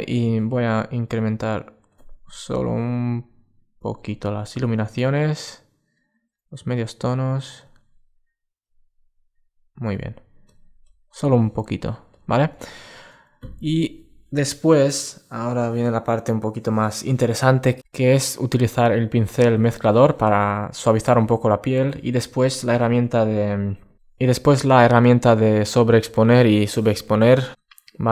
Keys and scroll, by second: 12.4 alt+space.